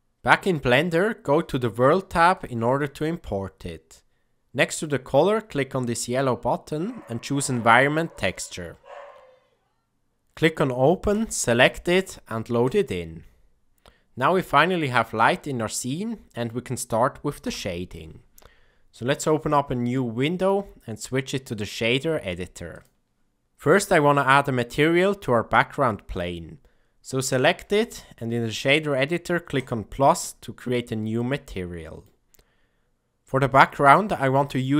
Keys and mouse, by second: 1.3 click, 2.3 click, 4.6-8.3 drag, 10.2 click, 13.5-15.3 middle drag, 16.3 KP_0, 18.5 click, 20.4-21.7 drag, 27.1 click, 27.5 n, 31.1-32.1 middle drag.